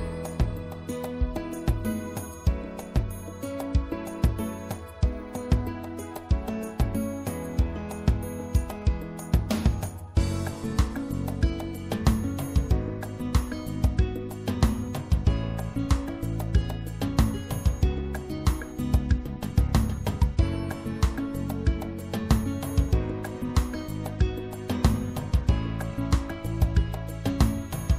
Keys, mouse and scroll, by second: 0.9 right click, 3.5-4.7 middle drag, 4.7 right click, 6.0 click, 6.2 middle click, 9.6-11.0 middle drag, 11.0-13.2 drag, 13.6 middle click, 15.4 middle click, 15.8-19.6 drag, 19.6 middle click, 20.1 click, 20.4 middle click, 20.8-22.6 drag, 24.3-27.6 middle drag.